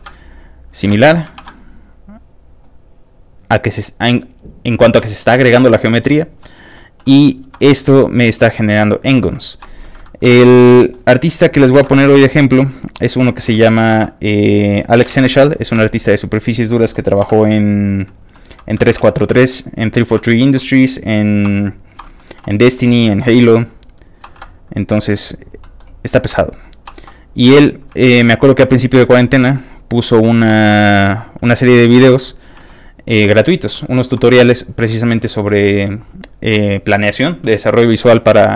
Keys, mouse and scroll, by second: 0.7 click, 0.9 ctrl+z, 2.5 scroll up 1, 6.1 ctrl+click, 6.4 ctrl+middle click, 7.0 ctrl+middle click, 7.4 1, 7.6 middle click, 8.2 click, 8.8 click, 9.1 middle click, 9.5 click, 10.2 shift+j, 10.4 middle click, 11.2 middle click, 11.7 ctrl+z, 11.9 ctrl+click, 12.2 middle click, 12.9 click, 14.9 click, 15.1 ctrl+z, 15.3 ctrl+shift+middle click, 15.8 shift+click, 16.2 click, 16.4 click, 17.2 click, 18.0 shift+click, 18.3 shift+middle click, 18.8 ctrl+z, 19.6 ctrl+click, 19.6 z, 19.8 ctrl+middle click, 20.3 ctrl+shift+click, 20.6 shift+middle click, 21.0 shift+click, 21.7 shift+click, 22.0 shift+middle click, 22.3 shift+j, 22.7 middle click, 23.4 click, 23.9 shift+click, 24.3 shift+j, 24.5 click, 24.9 middle click, 25.4 click, 25.6 middle click, 26.1 click, 26.7 shift+click, 27.5 shift+middle click, 28.3 shift+click, 28.7 shift+middle click, 29.0 shift+j, 29.2 middle click, 29.7 click, 30.3 click, 30.7 shift+j, 30.8 middle click, 31.6 scroll down 1, 31.7 middle click, 32.0 Tab, 32.2 middle click, 32.6 middle click, 33.8 shift+middle click, 34.3 shift+middle click, 35.2 shift+middle click, 37.9 shift+middle click, 38.1 shift+middle click.